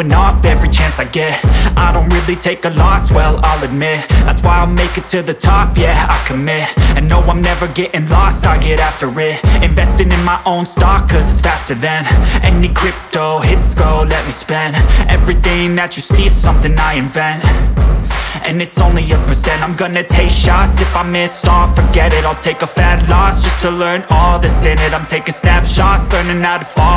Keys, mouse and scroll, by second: 1.4 click, 4.4 click, 13.7 click, 16.0 click, 20.0 click.